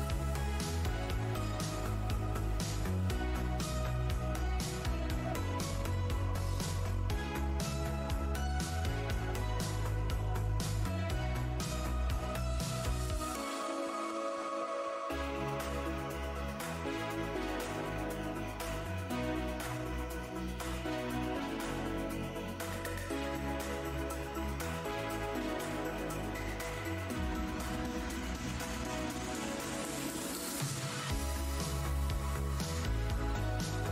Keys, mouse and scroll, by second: 1.3 shift+Tab, 2.1-2.7 scroll down 1, 3.1 shift+click, 3.4-3.8 scroll down 1, 3.4 e, 4.0 alt+Tab, 4.9 click, 7.3 Tab, 7.6 click, 7.8 Tab, 8.2 alt+click, 8.4 alt+scroll down 1, 9.9 Tab, 13.4 alt+click, 14.7 alt+click, 16.2 alt+click, 17.2 Tab, 17.4 click, 19.0 shift+Tab, 20.7 click, 21.9 Tab, 22.5 shift+Tab, 23.4 alt+Tab, 24.1 alt+click, 24.2 alt+Tab, 24.3 alt+scroll, 24.3 alt+scroll up 1, 25.0 click, 25.4 Tab, 26.1 alt+Tab, 26.4 alt+scroll up 1, 27.3 alt+Tab, 27.5 click, 28.0 click, 29.4 click, 29.4 Tab, 29.5-30.0 scroll down 1, 30.1 Tab, 30.4 shift+click, 31.0 ctrl+Tab, 31.5 ctrl+g, 31.5-32.3 scroll down 2, 32.7 Tab, 32.7 alt+click.